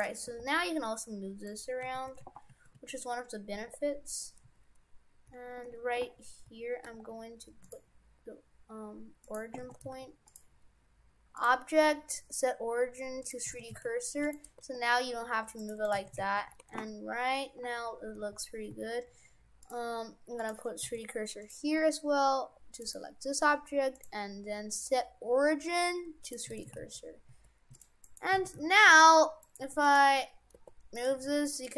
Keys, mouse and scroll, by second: 0.0 right click, 0.3 r, 1.9 shift+f, 9.2 click, 9.7 shift+f, 11.4 click, 13.6 shift+f, 14.6 r, 15.9 right click, 16.0 shift+f, 20.4 click, 20.9 shift+f, 22.8 right click, 24.0 click, 26.4 click, 26.6 shift+f, 28.0 right click, 28.4 shift+f, 29.4 right click, 29.7 ctrl+Tab, 29.8 right click, 30.6 r, 31.2 ctrl+Tab, 31.6 right click.